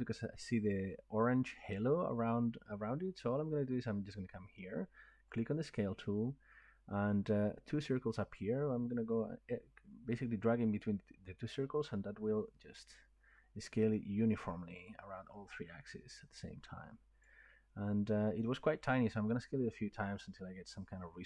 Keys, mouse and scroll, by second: 5.4-10.5 drag, 17.2 click, 17.7-19.6 scroll.